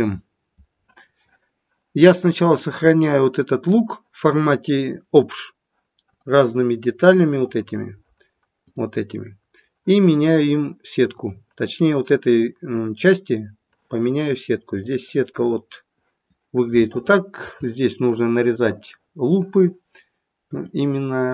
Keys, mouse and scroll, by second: 12.9 click, 13.2 click, 17.4 click.